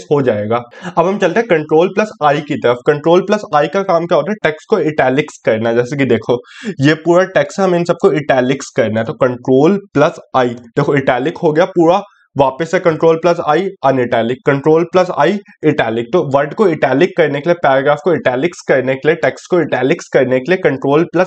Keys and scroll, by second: 1.0 ctrl+i.